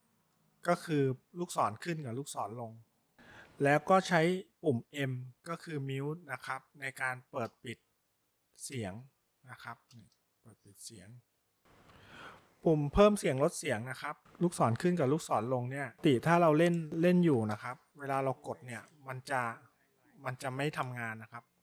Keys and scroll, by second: 0.8 Up, 2.0 Down, 2.4 Down, 3.0 Down, 5.6 Up, 5.6 m, 7.6 m, 8.8 m, 10.0 m, 15.7 Up, 15.7 Down, 20.8 Up, 20.8 Down.